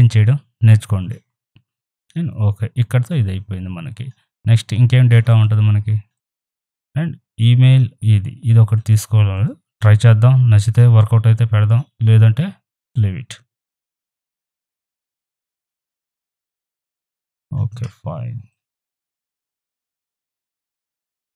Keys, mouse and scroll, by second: 5.3 click, 7.6 scroll down 1, 8.8 right click, 9.4-13.7 drag, 13.7 ctrl+t, 14.1-16.5 alt+drag, 16.5 ctrl+t, 16.7 right click, 17.1-19.9 drag, 19.9 ctrl+t, 20.4-21.3 alt+drag.